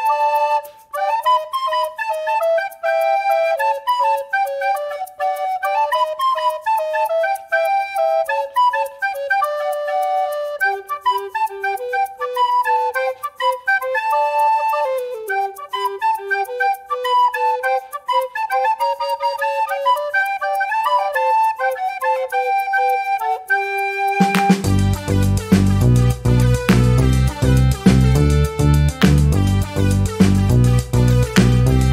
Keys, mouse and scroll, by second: 1.4 click, 2.8 click, 5.2 ctrl+d, 6.1-7.5 ctrl+shift+drag, 7.8 ctrl+shift+click, 8.9-10.3 ctrl+shift+drag, 10.6-12.2 ctrl+shift+drag, 12.5 d, 13.0 click, 14.2 click, 15.3 ctrl+d, 16.7 click, 17.7-19.6 typing, 20.6 Return, 22.1 click, 23.0 shift+=, 23.8 3, 24.2 Return, 25.5-26.7 drag, 26.8 click, 27.6 click, 28.3 ctrl+z, 29.0 ctrl+click, 30.5-31.9 drag.